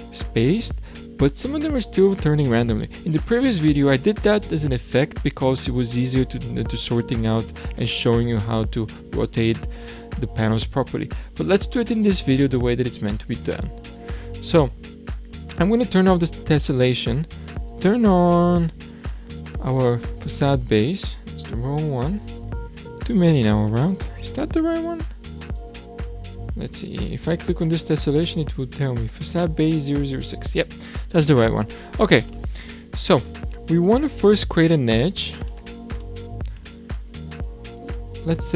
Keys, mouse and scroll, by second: 13.9 click, 14.4-17.4 scroll down 1, 17.7 click, 18.3 click, 18.7 click, 20.2-22.1 scroll down 4, 22.1 click, 23.0 click, 23.8-25.4 scroll up 5, 25.4 drag, 26.7 click, 27.9-28.4 scroll down 6, 30.6 click, 31.7-32.2 scroll down 2, 32.2-34.4 middle drag, 34.4 Tab, 34.9-35.5 scroll down 4, 35.5-37.5 shift+middle drag, 37.5 3, 37.8 click.